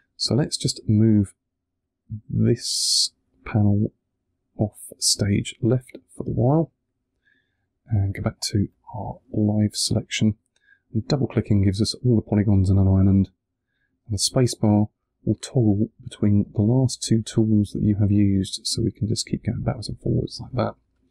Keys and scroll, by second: 14.1 space.